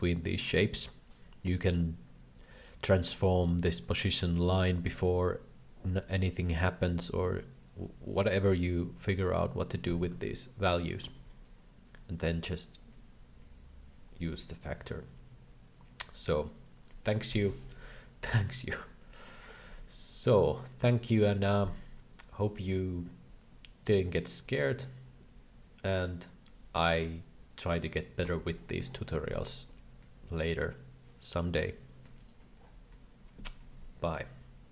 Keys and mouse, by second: 8.1-9.4 drag, 10.1 alt+a, 11.3 middle click, 12.1-15.0 drag.